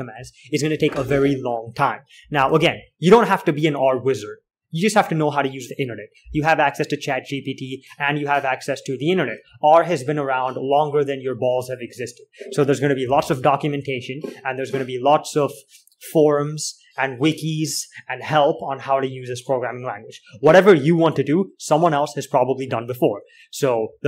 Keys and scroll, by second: 0.0-1.7 typing, 2.9 alt+Tab, 13.6 alt+Tab.